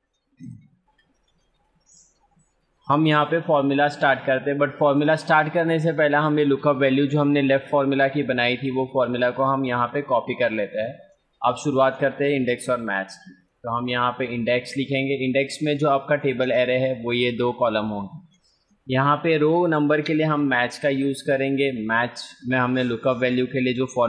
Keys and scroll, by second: 4.8 F2, 16.3 ctrl+space.